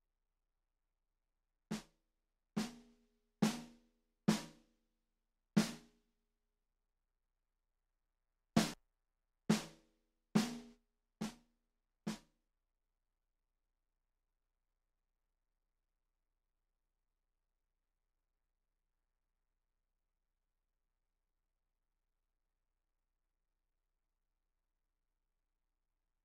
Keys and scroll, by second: 1.3 space, 8.8 space, 9.1 space, 12.5 space.